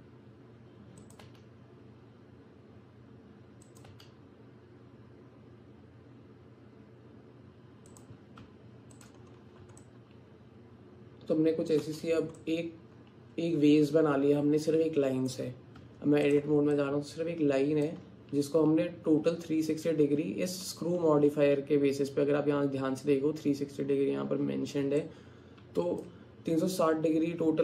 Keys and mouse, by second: 1.3 e, 3.9 e, 8.4 Tab, 9.8-11.8 alt+drag, 12.4-15.3 alt+drag, 15.8 Tab, 16.8-17.9 drag, 25.1 alt+click.